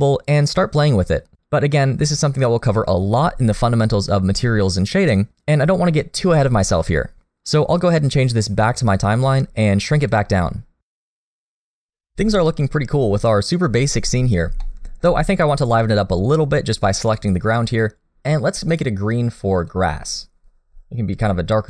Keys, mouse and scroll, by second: 10.9 click, 14.1 scroll down 1, 14.6 shift+middle click, 15.2 middle click, 17.0 click, 18.7 click.